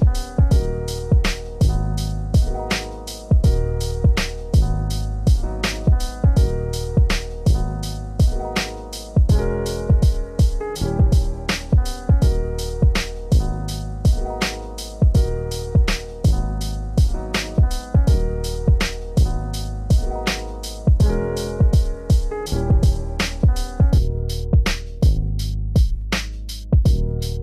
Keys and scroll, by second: 1.7 ctrl+space, 4.2 ctrl+;.